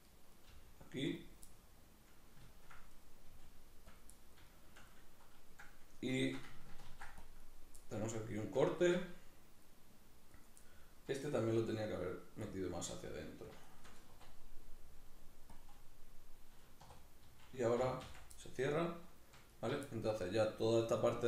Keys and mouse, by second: 0.1 right click, 0.3 g, 0.9 click, 1.3-2.7 middle drag, 2.7 right click, 3.1 g, 3.7 click, 3.8-7.3 middle drag, 6.6 ctrl+r, 7.3 right click, 7.5-8.5 middle drag, 9.4 right click, 10.0 right click, 10.4 middle click, 11.3 e, 12.3 click, 13.4 shift+right click, 14.5 w, 16.7 right click, 17.6 f, 18.1-19.3 middle drag, 19.3 alt+right click, 19.7-21.2 middle drag.